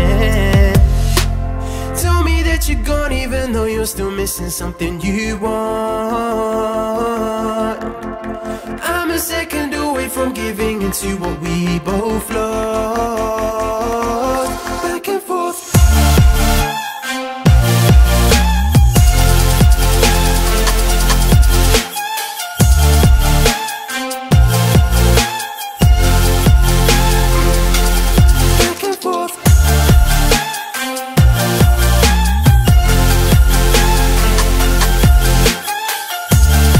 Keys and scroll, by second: 0.0 ctrl+z, 5.7 ctrl+z, 6.9 ctrl+z, 11.8 ctrl+z, 18.7 ctrl+z, 19.0 ctrl+z, 25.7 ctrl+z, 29.2 ctrl+z, 30.8 ctrl+z.